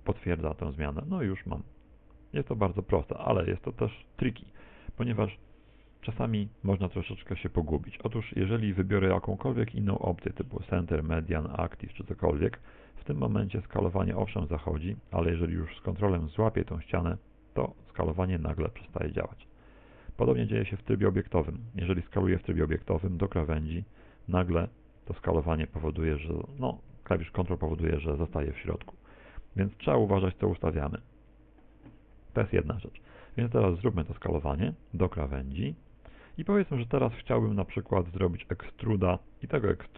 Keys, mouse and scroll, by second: 0.0 ctrl+click, 6.4 ctrl+z, 9.2 click, 13.6 s, 20.8 Tab, 30.9 click, 33.5 Tab, 36.0 ctrl+click, 37.6 middle click, 39.5 middle click.